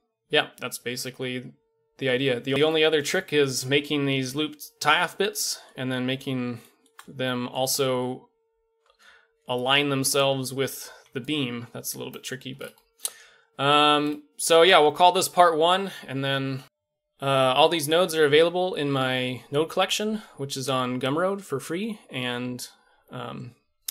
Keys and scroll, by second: 9.8 x, 11.0 d, 12.1 d, 12.1 d.